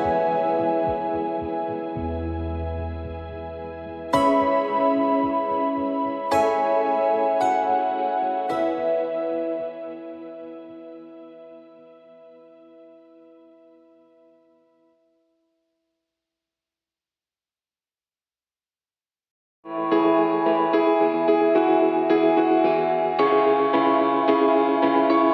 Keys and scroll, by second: 0.9-2.6 typing, 5.8 ctrl+=, 6.2-6.6 space, 7.9 ctrl+j, 10.5 2, 13.0-19.7 typing, 21.3 ctrl+j, 24.1 3.